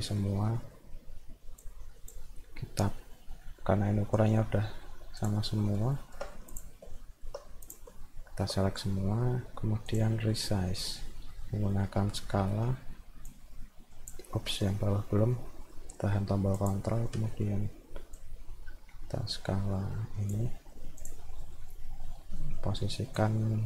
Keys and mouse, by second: 0.1 middle click, 0.6 middle click, 1.6 click, 3.4 middle click, 5.2 click, 5.7 middle click, 6.0 alt+middle click, 7.0 alt+middle click, 7.7 ctrl+click, 7.9 alt+middle click, 9.9 click, 10.3 middle click, 12.5 middle click, 13.3 click, 15.6 middle click, 16.6 ctrl+click, 17.3 middle click, 18.2-20.3 drag, 21.0 click, 21.4 middle click, 22.3 middle click, 23.2-23.6 drag.